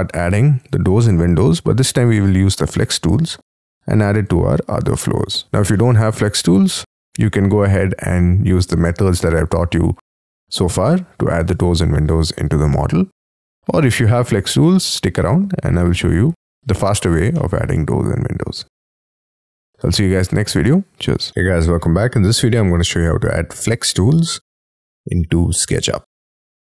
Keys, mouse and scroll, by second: 1.0-2.5 scroll up 19, 5.3 middle click, 5.7 shift+middle click, 8.3-11.3 scroll up 6, 17.3 middle click, 19.2 double click, 21.3 middle click, 22.0-22.7 scroll down 13, 22.9 middle click, 24.9-25.5 scroll up 10, 25.8 scroll down 6, 26.2-26.6 scroll up 6.